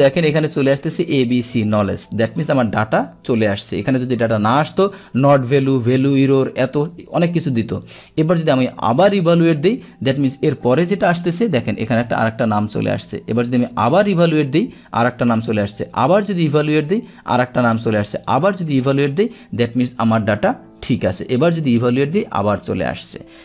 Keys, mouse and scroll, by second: 13.9 click, 18.2 click, 21.5 click.